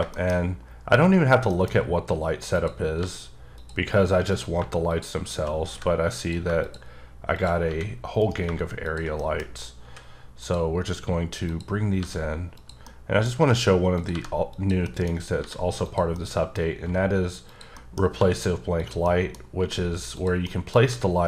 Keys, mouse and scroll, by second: 0.1 shift+middle click, 1.5 middle click, 2.5 click, 3.0 g, 3.5 click, 4.3 click, 4.9 shift+click, 5.7 g, 5.8 h, 6.2 click, 7.3 shift+double click, 7.7 g, 8.2 right click, 8.8 shift+click, 9.2 middle click, 9.5 scroll up 2, 9.8 s, 10.4 click, 10.7 scroll up 3, 11.5 click, 12.0 g, 12.5 click, 12.8 middle click, 13.3 scroll up 1, 13.9 click, 14.1 g, 14.5 click, 14.8 middle click, 15.1 scroll up 3, 15.4 g, 15.8 click, 16.1 middle click, 16.6 scroll up 1, 16.8 g, 17.5 click, 17.7 middle click, 18.0 scroll up 1, 18.1 g, 18.8 click, 19.0 middle click, 19.6 g, 20.1 click, 20.4 middle click, 20.9 g.